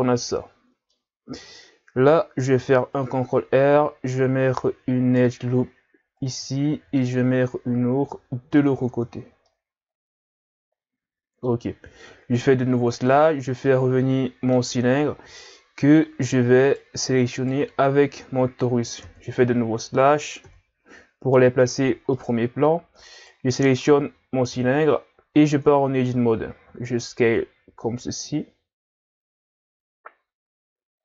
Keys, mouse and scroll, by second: 1.2-1.5 scroll down 1, 1.5-2.0 scroll up 3, 2.6 ctrl+r, 6.7 ctrl+r, 8.9 Tab, 9.2 scroll down 2, 9.5-12.5 middle drag, 12.5 KP_Divide, 13.7-15.0 middle drag, 15.0-16.2 scroll up 2, 16.2-16.6 scroll up 1, 16.6 right click, 17.4 shift+right click, 19.0 KP_3, 20.5 KP_Divide, 22.2-23.2 middle drag, 23.2 right click, 24.6 KP_3, 25.4 Tab, 26.7 s.